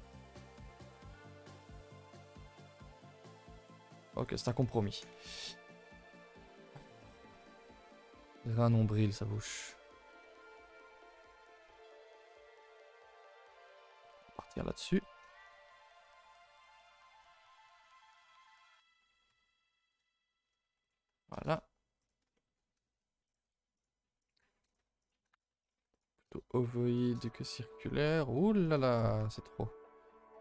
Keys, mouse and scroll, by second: 0.3 click, 1.1 click, 1.3 click, 1.9-3.5 drag, 3.6-5.7 drag, 5.8-8.7 drag, 8.7 middle click, 9.2 scroll down 1, 9.3-9.6 scroll up 1, 9.6 middle click, 9.8-10.5 scroll up 6, 10.1 shift+middle click, 11.0 g, 11.9 click, 12.0 g, 12.8 scroll down 2, 13.1 middle click, 13.4 click, 13.8 shift+middle click, 14.3 scroll down 1, 14.6 shift+middle click, 14.8-15.6 scroll up 1, 15.6 ctrl+shift+b, 20.0 KP_0, 23.3 click, 24.2 click, 25.0 click, 25.6 click, 27.0 click, 28.6 click.